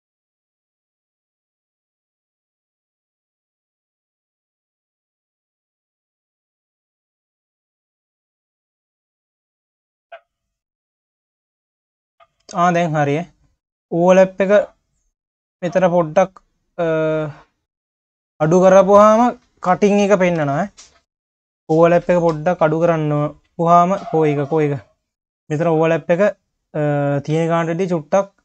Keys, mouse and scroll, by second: 0.0-1.1 scroll down 10, 1.4 click, 2.5-3.4 drag, 3.4 q, 4.5 shift+click, 5.7 ctrl+KP_Add, 7.1-8.2 scroll down 3, 8.2-10.5 drag, 10.5 scroll up 2, 10.8 q, 13.8-16.9 drag, 18.8 click, 19.4 q, 20.4 KP_3, 21.6 click, 22.5 click, 22.9 click, 24.6 click, 25.6-27.0 scroll down 1, 27.0-28.4 drag.